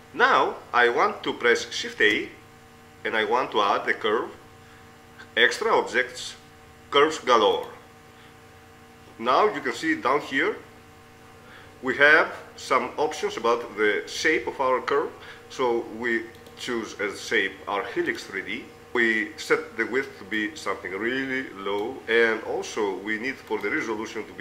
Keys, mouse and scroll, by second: 3.0 shift+a, 11.0-13.4 middle drag, 13.4 click, 15.0-16.0 middle drag, 16.6 click, 18.2 click, 18.9 middle click, 20.7-22.3 drag, 22.9 middle click, 23.7-24.4 drag.